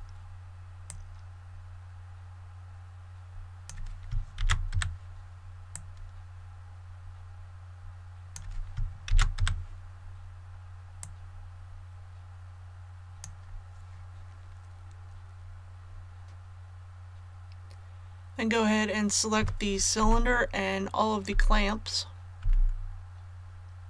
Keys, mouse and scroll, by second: 0.8-4.0 drag, 4.3 shift+d, 5.7-8.4 drag, 9.0 shift+d, 10.9-13.4 drag.